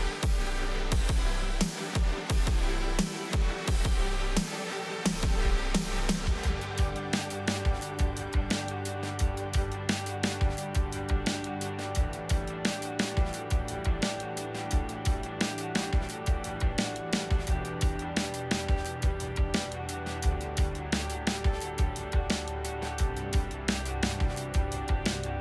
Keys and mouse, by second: 0.7 s, 1.6 r, 3.9 r, 6.5 g, 8.9 shift+click, 11.1 z, 11.9 ctrl+s, 12.5 click, 13.8 click, 14.5 middle click, 16.1 middle click, 18.0 shift+a, 21.9-25.3 shift+drag.